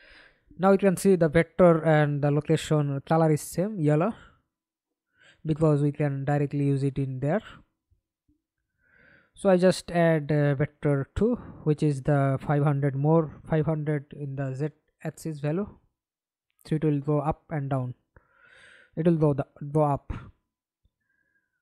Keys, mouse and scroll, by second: 0.8 right click, 7.2 double click, 15.6 middle click, 16.8 F11, 17.4 alt+p, 19.8 a, 20.6 s.